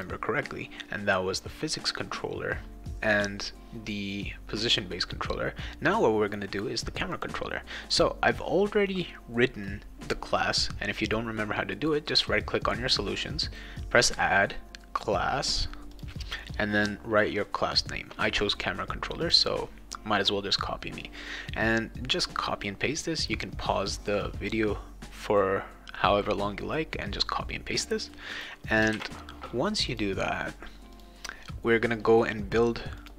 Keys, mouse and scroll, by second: 7.1 click, 7.9 click, 12.1 right click, 15.9 click, 19.2 click, 28.3 click, 28.9 ctrl+s, 29.9 click, 30.9 click, 33.0 click.